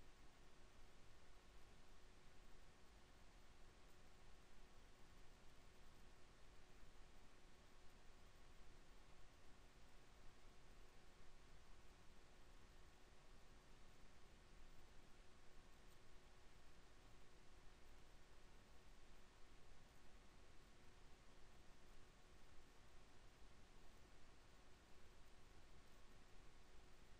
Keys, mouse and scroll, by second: 0.8 e, 6.7 KP_1, 8.3 ctrl+KP_7, 16.1-17.2 drag, 17.2 alt+m, 21.9 KP_1, 23.0 z, 25.1 a.